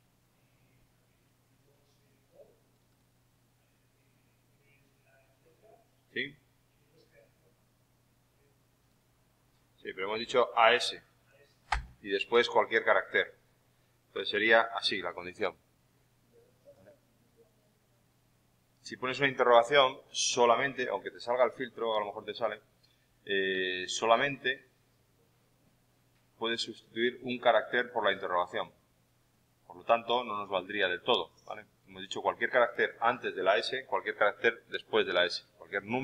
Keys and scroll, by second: 11.6 shift+=.